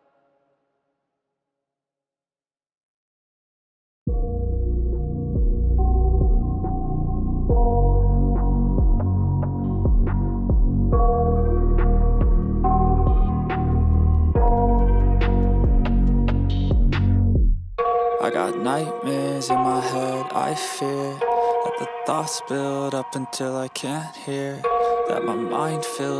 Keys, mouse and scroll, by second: 1.6 double click, 12.3-13.3 typing, 15.6-16.6 typing, 16.8 Return.